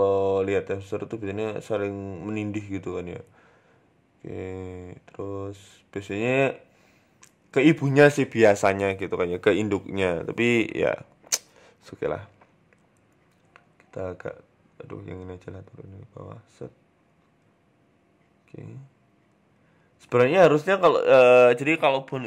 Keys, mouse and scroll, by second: 0.5 middle click, 1.8 right click, 2.3 KP_3, 2.7 scroll down 3, 2.9 middle click, 3.3 scroll up 3, 3.5-4.0 scroll down 2, 3.7 middle click, 4.0 scroll up 1, 4.2 middle click, 4.5-5.0 scroll down 2, 4.7 middle click, 9.6 right click, 10.3 click, 11.3 right click, 11.8 shift+right click, 12.3 middle click, 13.6 r, 15.0 right click, 15.3 shift+right click, 15.9 r, 17.5 middle click, 18.0 scroll up 3, 18.2 middle click, 18.5 Tab, 18.7 scroll down 4, 18.9 middle click, 19.6 click, 20.1 scroll down 1, 20.2 shift+middle click, 20.5 scroll up 4, 20.9 right click, 21.3 right click, 22.0 KP_3.